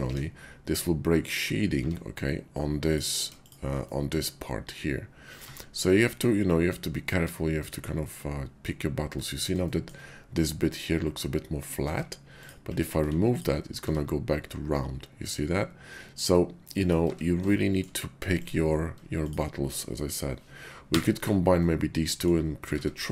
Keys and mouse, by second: 0.1 Tab, 1.7 Tab, 3.3 shift+click, 3.8-5.4 drag, 5.4 Tab, 6.0-8.6 middle drag, 9.1 middle click, 11.8 Tab, 12.3 click, 13.0 x, 13.7 Tab, 16.3 click, 17.1 Tab, 17.5 shift+click, 18.3 click, 20.9 1, 21.6 click, 22.7 Tab.